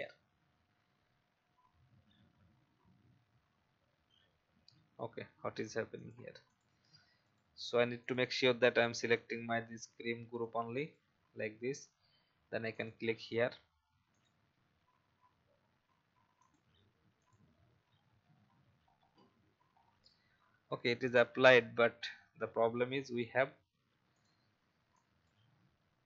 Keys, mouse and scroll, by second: 17.8-18.1 alt+scroll up 1, 19.1-19.6 alt+scroll down 1, 19.7-20.1 alt+scroll up 1, 21.0 alt+scroll up 1, 24.1 click.